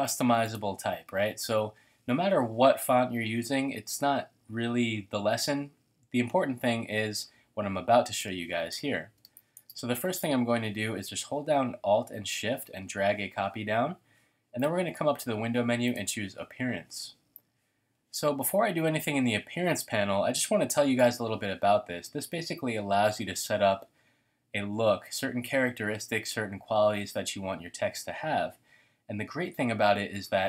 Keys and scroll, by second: 9.2 space.